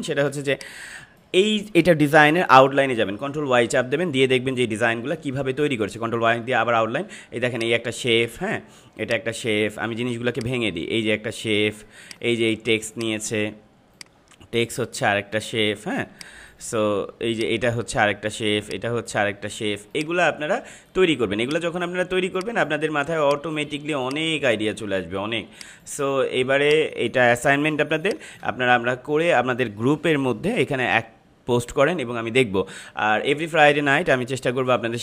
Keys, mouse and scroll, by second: 0.2 space, 0.4 click, 0.7 space, 2.2 ctrl+-, 3.4 ctrl+y, 6.0 ctrl+y, 7.5 click, 7.6 click, 8.3 ctrl+-, 8.9-15.3 drag, 15.3 ctrl+-, 16.0 space, 16.1 click, 16.5 space, 17.2-27.7 drag, 27.7 space, 28.0 click, 28.2 space, 30.5 click.